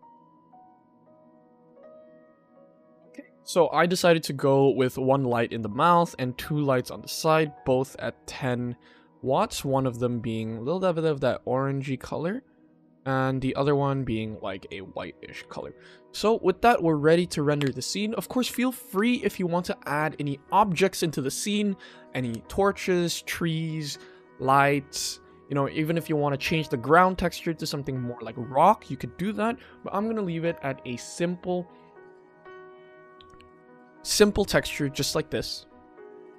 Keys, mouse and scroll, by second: 0.4 click, 1.2 ctrl+s, 4.6 click, 5.5 click, 5.9 click, 6.7 click, 7.2 click, 8.1 click, 9.6 click, 10.9 click, 11.7 click, 13.5 click, 14.6 click, 15.4 ctrl+s.